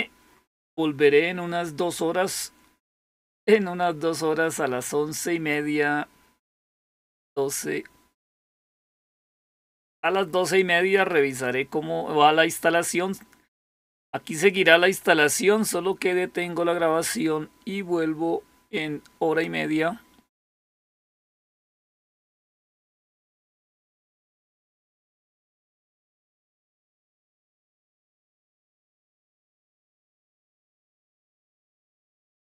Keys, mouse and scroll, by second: 14.3 click, 22.9 click, 23.3 click, 28.0 click, 30.2-32.4 typing.